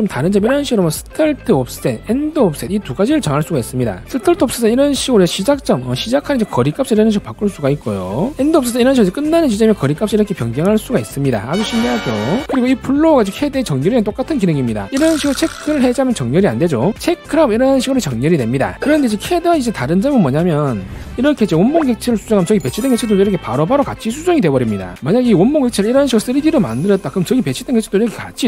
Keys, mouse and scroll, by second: 4.4 click, 5.3-8.3 drag, 8.9-12.4 drag, 15.8 click, 17.2 click, 19.3 click, 19.7 click, 22.1 click, 23.8-24.9 drag, 26.1-28.3 drag.